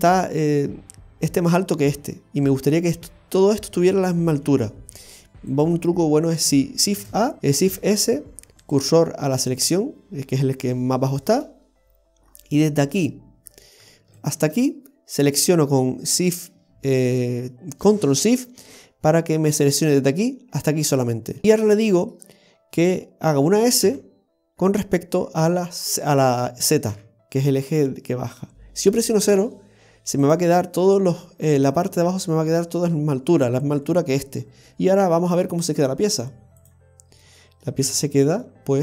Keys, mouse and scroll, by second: 5.5 right click, 7.0 shift+a, 7.7 shift+s, 11.3-12.2 scroll down 1, 12.2-13.0 scroll down 8, 13.0 middle click, 14.2 ctrl+shift+right click, 21.1-21.4 scroll down 5, 21.4 middle click, 21.4 scroll up 6, 34.5 scroll down 2, 34.7 scroll up 1, 34.7 middle click, 34.7-35.2 scroll down 4, 36.6 click, 37.1-37.4 scroll down 1, 37.4 middle click, 37.7 scroll up 1, 37.9 Tab, 38.5 middle click.